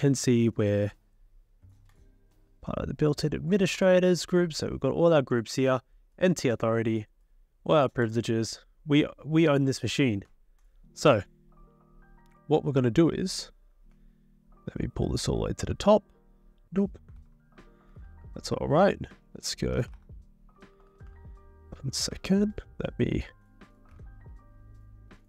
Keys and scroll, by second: 13.9 Return, 14.4 Return, 14.5-15.6 Return, 17.1 ctrl+l, 17.9 BackSpace, 18.0 BackSpace, 18.1 BackSpace, 19.5-21.1 typing.